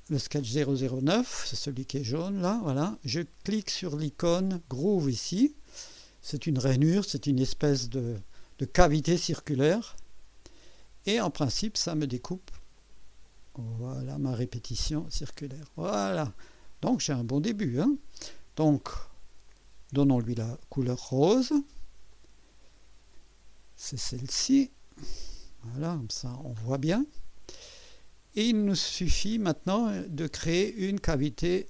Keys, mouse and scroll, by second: 9.9 click, 12.7 click, 14.6-17.8 drag, 19.5 click, 20.8 ctrl+d, 22.1 click, 24.0 click, 25.3 click, 26.3 click, 26.9 click, 27.7-29.3 drag, 29.4 scroll up 1, 29.9 right click.